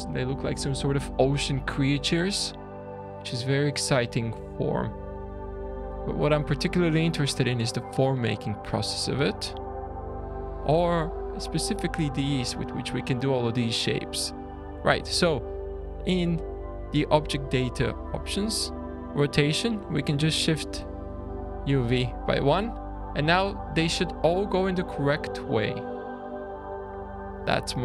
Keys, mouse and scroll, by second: 0.8 `, 0.9 scroll up 4, 1.4 middle click, 2.1-2.5 scroll down 1, 2.5 scroll up 3, 3.5 click, 4.1 Tab, 4.7 Tab, 5.9-6.3 scroll down 6, 16.9-18.0 scroll down 4, 18.0-18.7 scroll down 4, 20.9 click, 20.9-21.5 scroll down 8, 23.0 scroll down 1, 23.3 shift+middle click, 26.5 shift+scroll down 1, 26.8-27.5 scroll up 7, 27.6 scroll down 2.